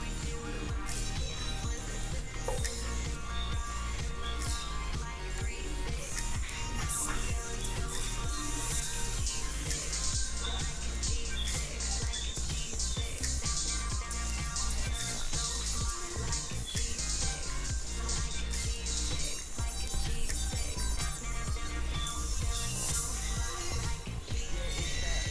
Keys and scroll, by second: 14.2 ctrl+z.